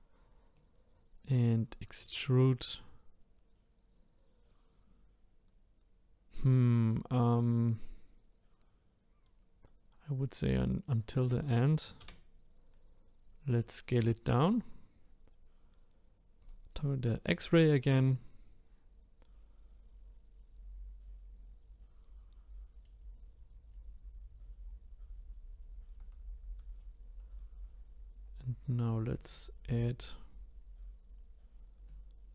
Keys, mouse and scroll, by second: 0.5 click, 16.4-19.4 drag, 29.2-32.3 drag.